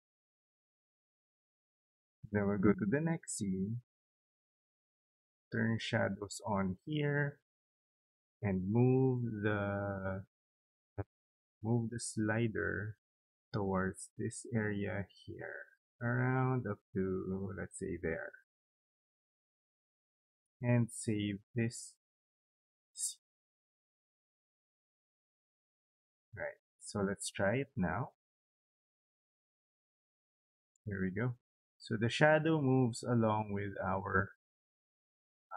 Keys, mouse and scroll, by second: 1.9 click, 2.1 click, 6.2 click, 11.5-17.8 drag, 20.2 right click, 23.1 click, 24.9 click, 27.7 click, 27.9 click, 31.9 click, 32.1 click, 35.5 click.